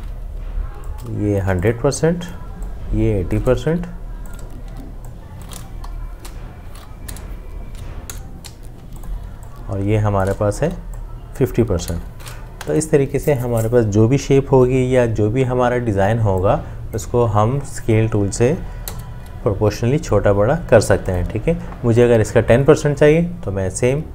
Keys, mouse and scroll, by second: 0.9 alt+click, 5.8 t, 8.1 0, 8.7 Escape, 9.6 alt+click, 11.8 5, 12.4 Escape, 18.9 ctrl+0.